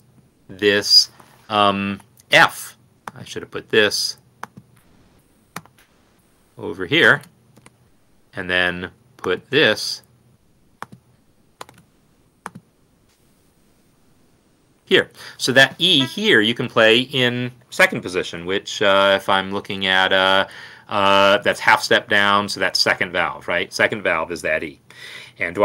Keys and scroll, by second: 0.5 n, 5.7 ctrl+x, 11.7 ctrl+c, 13.4 ctrl+v, 14.3 ctrl+Up, 14.8 Escape.